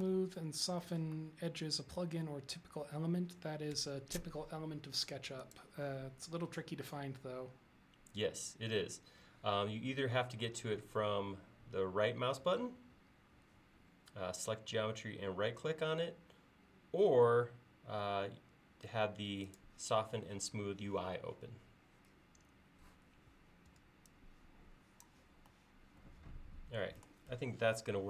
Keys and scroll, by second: 0.1 super+z, 3.8 r, 23.7 e.